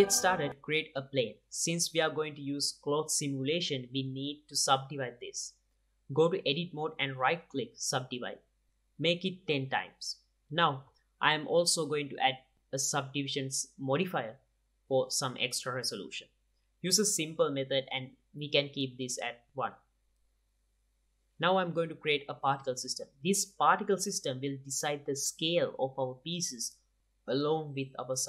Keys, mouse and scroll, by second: 0.5 shift+a, 2.5-3.3 drag, 3.3 middle click, 5.1-6.1 drag, 6.5 Tab, 7.5-9.5 drag, 11.4-17.3 drag, 13.4 Tab, 18.2-20.4 drag, 21.1-24.5 drag, 24.9-28.2 drag.